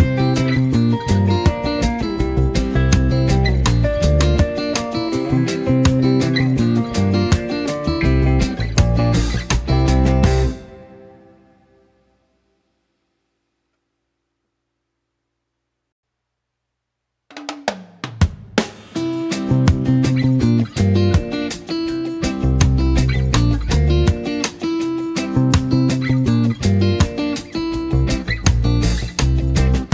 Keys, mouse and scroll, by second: 5.2 right click, 6.1-7.9 drag, 9.8 space, 10.0-14.4 drag, 15.0 ctrl+z, 15.5-16.5 drag.